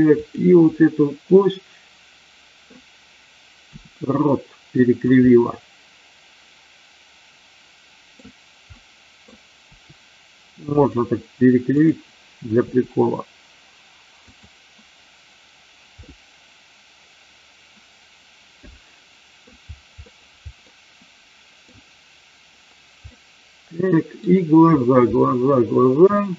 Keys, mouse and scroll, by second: 0.1 click, 1.2-2.7 middle drag, 3.7 r, 4.7 click, 5.2-8.2 middle drag, 8.6-9.2 middle drag, 9.6 r, 10.6 click, 11.7 click, 12.6 r, 14.2 click, 16.0-19.5 middle drag, 20.0 middle click, 20.6-21.6 middle drag, 21.6-23.1 scroll down 1, 23.1-24.1 middle drag, 26.1-26.3 shift+middle drag.